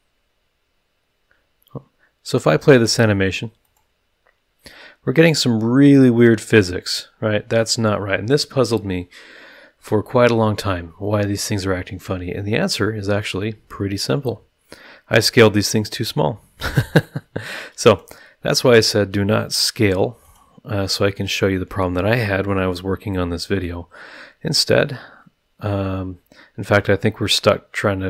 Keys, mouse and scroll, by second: 3.6 click, 6.5 click, 17.9 click, 20.2 click.